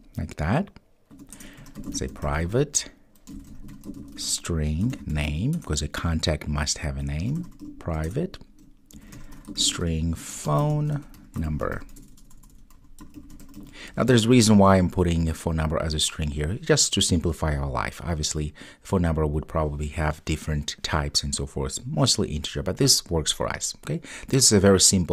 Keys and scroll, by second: 8.1 Return.